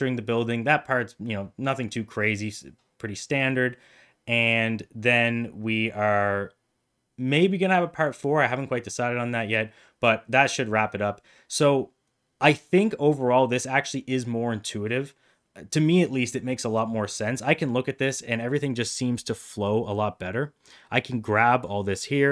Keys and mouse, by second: 19.5 middle click, 20.6-21.6 drag.